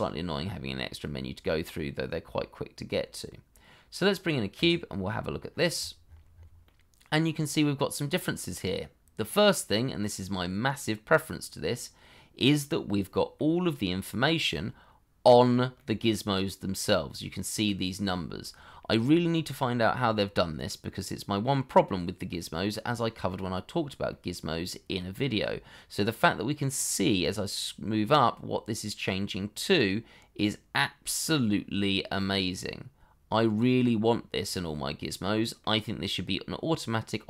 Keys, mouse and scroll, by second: 5.5-5.8 scroll down 1, 6.6 middle click, 7.0 scroll down 1, 7.2 scroll up 1, 7.6 middle click, 11.9-12.5 scroll up 1, 12.5 middle click, 15.7 middle click, 20.3 middle click, 33.9-34.3 scroll down 1, 34.3 middle click.